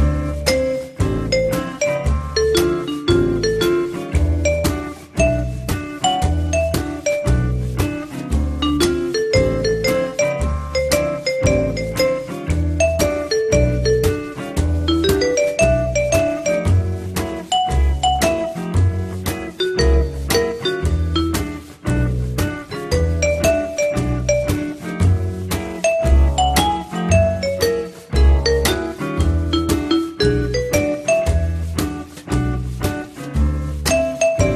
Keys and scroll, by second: 3.5 F3, 5.4 t, 8.6 F3, 17.7 p, 18.3 z, 20.0 F3, 26.0 9, 26.6 Return.